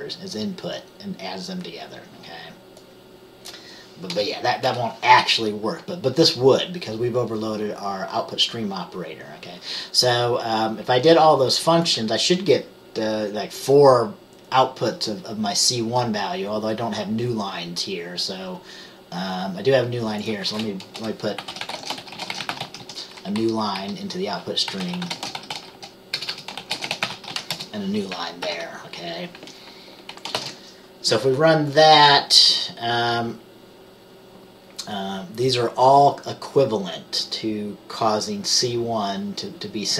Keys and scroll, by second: 4.2 BackSpace, 21.1 Return, 22.5-22.9 typing, 23.5 Down, 23.9 Down, 24.6-27.4 typing, 27.6 Return, 28.5 ctrl+s, 30.5 ctrl+b.